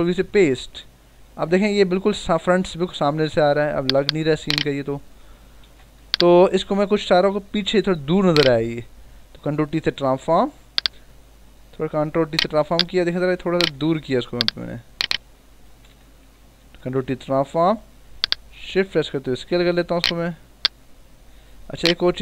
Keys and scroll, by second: 0.1 v, 2.7 b, 3.2 v, 3.7 b, 5.6 ctrl+alt+z, 6.1 v, 9.8 ctrl+t, 13.8 ctrl+z, 15.6 Escape, 16.5 ctrl+t.